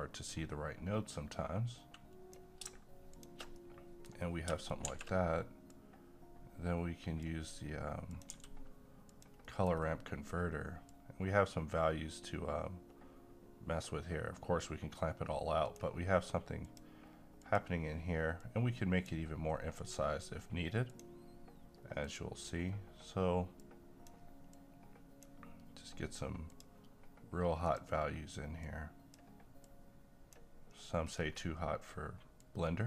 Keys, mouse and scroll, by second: 3.5 middle click, 4.2 scroll up 1, 4.9 shift+a, 5.7-8.1 drag, 8.3 g, 9.1 click, 9.5 middle click, 9.8-10.9 scroll up 1, 10.9-31.1 drag, 31.1-32.4 scroll up 1, 32.4-32.8 drag.